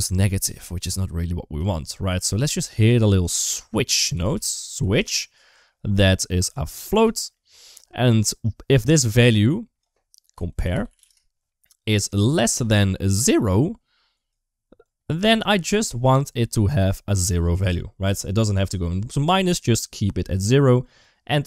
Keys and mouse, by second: 1.9 middle click, 2.4 click, 3.1 shift+a, 6.3 click, 7.3 shift+middle click, 8.5 click, 9.3-11.5 drag, 12.0 click, 13.9 click, 14.6 click, 15.8 middle click.